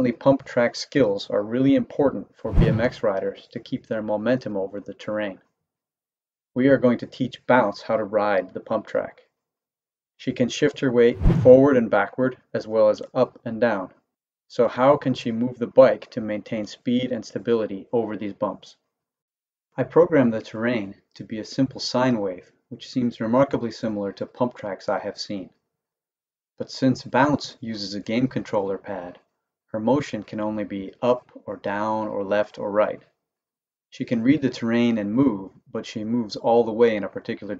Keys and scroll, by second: 0.2 Right, 0.8 Left, 1.2 Right, 1.5 Left, 2.0 Right, 2.3 Left, 7.3 Left, 7.7 Right, 8.9 Left, 9.6 Right, 12.9 Left, 13.9 Right, 15.0 Left, 15.8 Right, 27.5 Down, 30.3 Up, 30.9 Down, 33.5 Up, 34.1 Down, 37.1 Up.